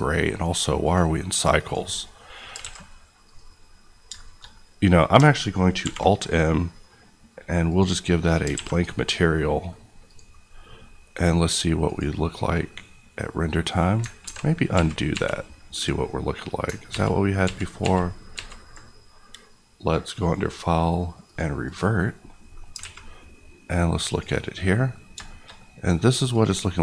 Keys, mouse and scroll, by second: 1.7 click, 2.2 middle click, 2.5 alt+a, 3.2 click, 3.7-4.1 scroll down 1, 4.1 middle click, 5.8 alt+middle click, 7.6 click, 8.5 alt+a, 8.8 middle click, 10.0 click, 12.6 middle click, 14.2 ctrl+alt+z, 14.7 ctrl+z, 15.9 ctrl+middle click, 16.8 ctrl+z, 20.1 click, 22.5 middle click, 22.7 alt+a, 24.0 click, 24.7 middle click, 24.9 scroll up 1, 25.2 shift+middle click, 26.3 click.